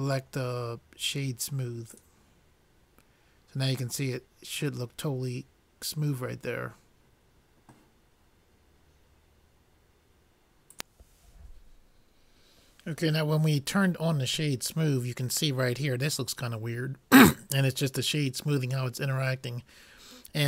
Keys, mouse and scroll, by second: 10.7 n.